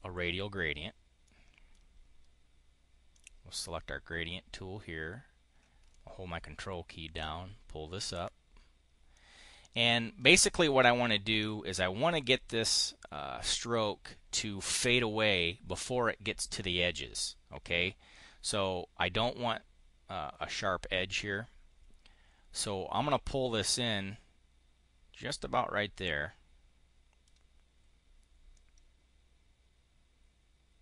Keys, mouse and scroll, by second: 1.0 right click, 3.0 click, 5.8-8.1 ctrl+drag, 9.0-11.4 ctrl+drag, 17.9-27.2 ctrl+drag, 28.4-30.8 ctrl+drag.